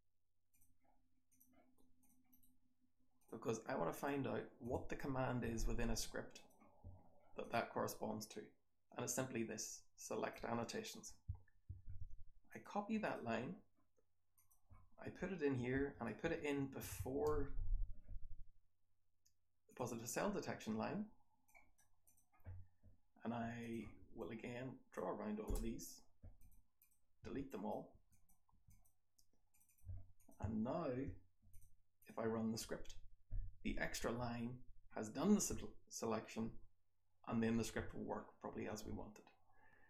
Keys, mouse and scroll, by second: 22.0 click, 23.5 click, 23.7 r, 24.3-24.9 drag, 25.5 BackSpace, 26.7 click, 27.2 r, 27.4 drag, 27.9 r, 28.1 click, 28.4 r, 28.7 click, 29.4 click, 29.6 click.